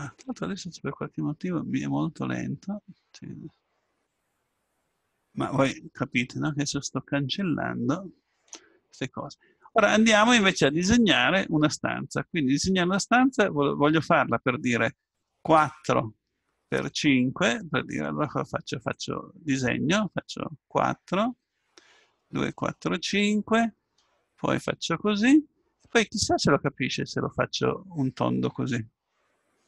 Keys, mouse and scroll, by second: 10.8-12.7 drag.